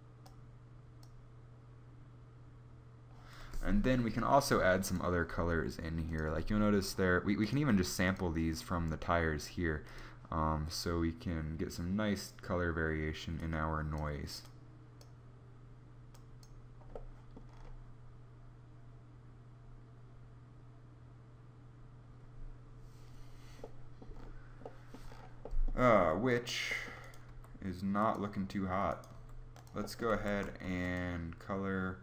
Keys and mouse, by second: 27.0 g, 28.9 g, 30.2 g, 30.2 shift+a.